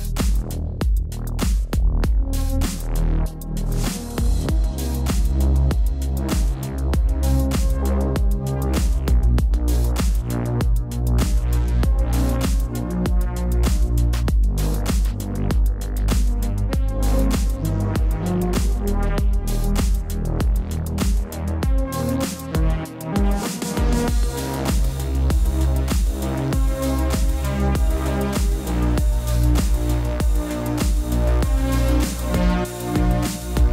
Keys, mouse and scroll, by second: 2.8 click, 5.1 click, 8.3 click, 9.0 click, 10.9 alt+click, 21.3 typing, 32.5 click.